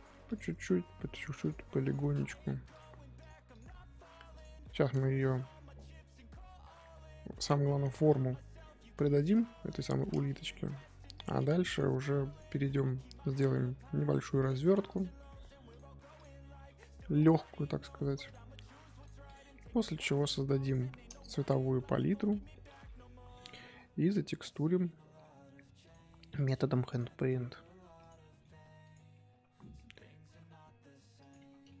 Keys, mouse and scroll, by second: 0.2 click, 1.8 click, 3.2 click, 3.5 click, 4.6 middle click, 5.2 Tab, 5.5-8.9 middle drag, 8.9 KP_1, 10.5 Tab, 11.1 click, 11.7 click, 12.3 click, 14.9 click, 16.1 click, 17.8 click, 18.2 click, 19.2 click, 21.7-23.5 middle drag, 23.5 KP_1, 24.0-25.8 middle drag, 25.8 click, 26.9 ctrl+click, 28.0 click, 28.2 middle click, 28.8 ctrl+click, 29.1-31.8 middle drag.